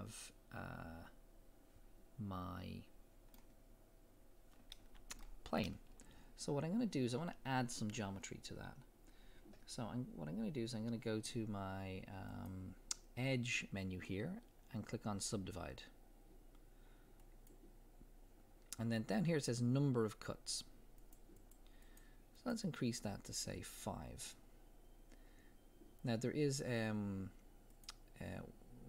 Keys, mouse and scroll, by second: 0.1-10.2 middle drag, 3.6 scroll up 1, 10.9-12.3 middle drag, 12.3-22.9 drag, 27.7 click.